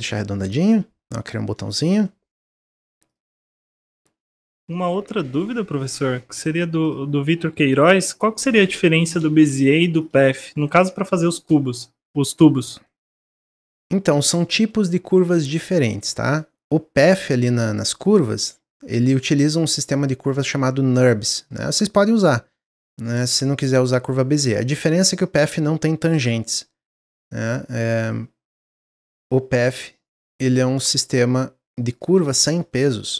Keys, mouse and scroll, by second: 0.1 click, 0.6 Tab, 0.7-1.1 scroll down 1, 1.1 middle click, 1.5 Tab, 1.6 click, 2.0-3.0 middle drag, 3.0 click, 3.2-5.0 middle drag, 5.0 shift+d, 7.2-11.1 drag, 11.1 middle click, 12.0 click, 12.8 middle click, 13.5-14.6 drag, 14.6-15.5 middle drag, 15.5-16.0 scroll up 3, 16.0-17.5 middle drag, 17.5 click, 19.3 click, 20.2-21.8 middle drag, 21.8 click, 23.4 click, 24.3 click, 25.4 click, 26.2-27.3 middle drag, 27.3 click, 28.8 middle click, 29.6-30.8 drag, 31.8 click, 32.1 scroll down 1, 32.4-32.8 middle drag, 32.8-33.1 scroll down 4.